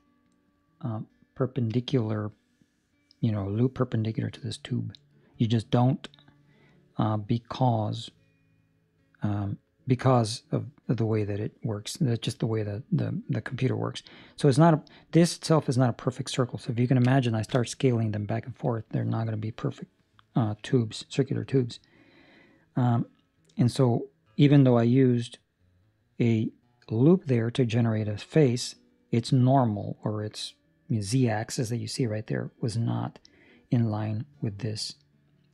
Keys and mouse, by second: 22.6 middle click, 28.3 middle click, 32.2 middle click, 32.9 middle click, 34.8 middle click, 35.4 middle click.